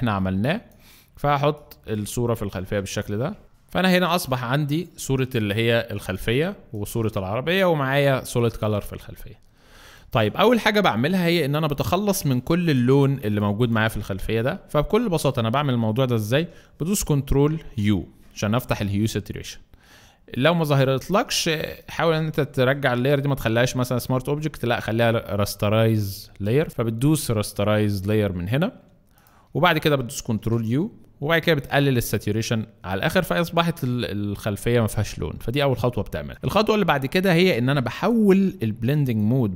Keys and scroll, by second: 9.6 alt+space, 17.6 ctrl+u, 30.3 ctrl+u.